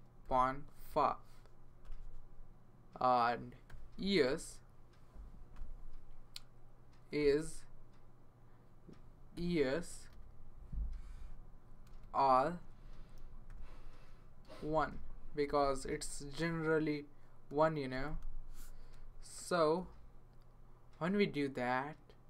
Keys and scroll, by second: 0.2 ., 0.9 5, 1.8 Return, 3.4-4.8 typing, 5.5 Return, 7.0-7.4 typing, 9.1-10.6 typing, 11.2 Return, 11.9 space, 13.5-15.8 typing, 17.7-20.3 typing.